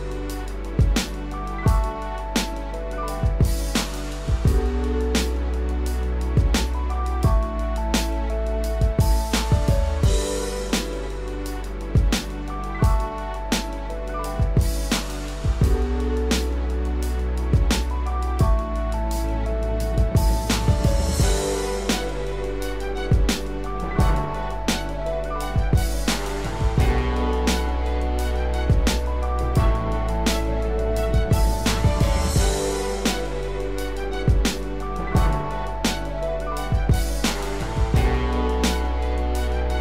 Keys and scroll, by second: 0.5 ctrl+z, 1.4 ctrl+-, 9.2 ctrl+z, 12.3 ctrl+=, 26.2 ctrl+-, 36.9 ctrl+=, 39.5 ctrl+-.